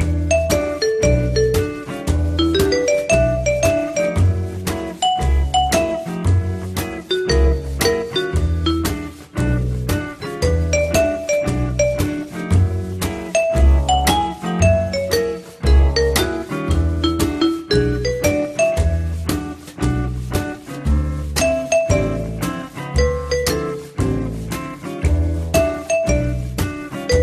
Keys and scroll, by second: 8.5 5, 9.0 Return.